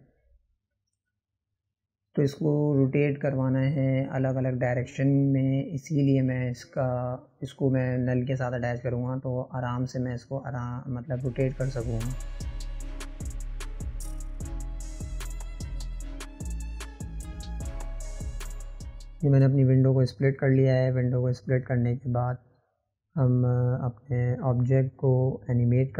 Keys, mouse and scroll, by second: 0.9-2.1 scroll up 1, 2.1-3.9 middle drag, 3.9 click, 6.2 click, 6.9 shift+click, 9.3 ctrl+p, 10.3 click, 10.8 click, 12.0-13.0 drag, 14.7 click, 17.4 right click, 18.9 n, 21.1-23.0 drag.